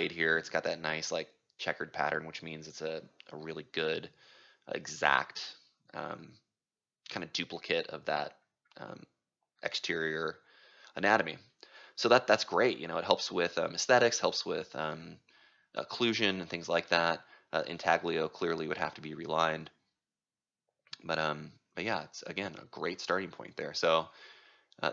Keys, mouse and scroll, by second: 0.0-1.4 right drag, 1.4 ctrl+click, 4.3-6.8 ctrl+drag, 4.7 middle click, 4.9 middle click, 7.7-9.4 right drag, 9.4-20.0 drag, 22.1-24.9 right drag.